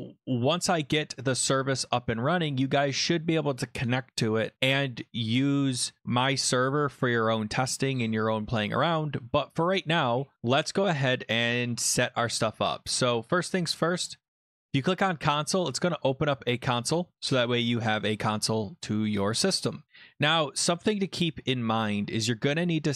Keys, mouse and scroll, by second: 14.6 click, 16.4 click, 22.2 click.